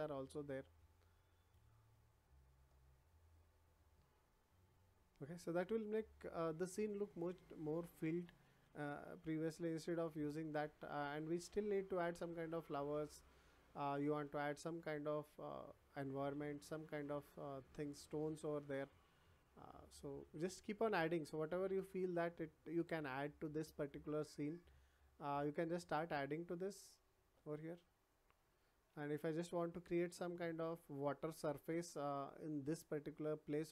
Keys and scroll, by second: 0.5 space, 7.2 w, 7.7 a, 8.8 w, 9.8 d, 10.3 w, 12.9 a, 18.6 w, 18.8 d, 20.2 w, 21.2 d, 23.6 w, 25.7 s, 26.9 w, 27.8 a, 29.3 w.